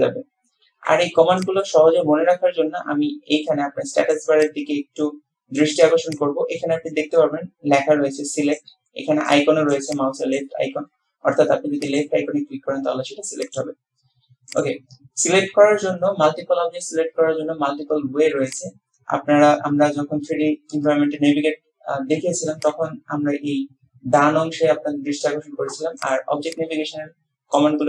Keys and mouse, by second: 12.0 click, 13.7-14.4 drag, 14.6 click.